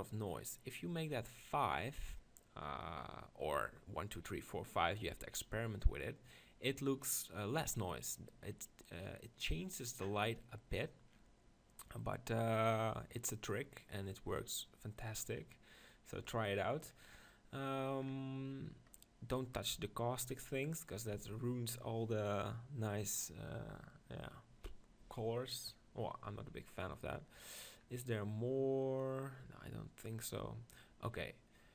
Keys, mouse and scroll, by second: 27.1-31.7 middle drag.